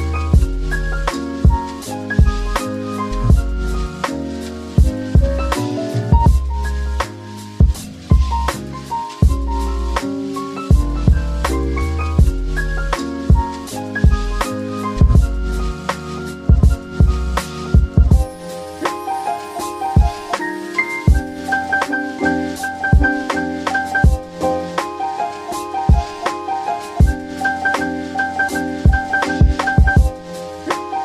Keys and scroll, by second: 10.6 m, 12.9 shift+Return, 24.4-25.5 typing.